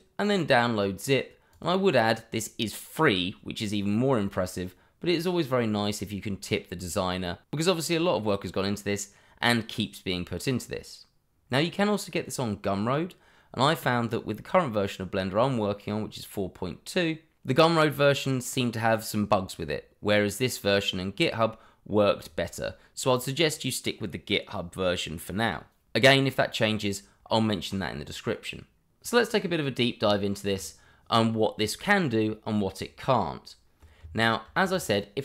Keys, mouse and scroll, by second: 1.5 click, 29.5 Delete, 30.1 shift+middle click, 34.4 shift+a.